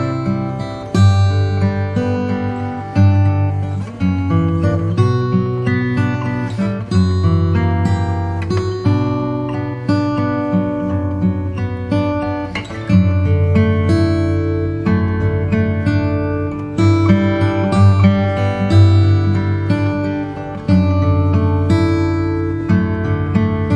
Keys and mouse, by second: 1.4 s, 3.5 g, 10.7 s, 14.1 g, 19.0 KP_7, 22.8 g.